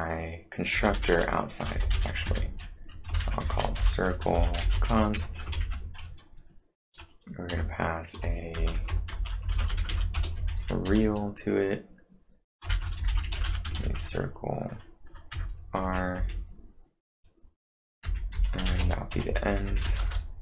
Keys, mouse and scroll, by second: 0.8 Return, 0.8 typing, 2.3-5.7 typing, 7.5 r, 8.6-11.4 typing, 12.7 shift+c, 13.8 shift+9, 15.1-15.8 typing, 18.6-20.2 typing.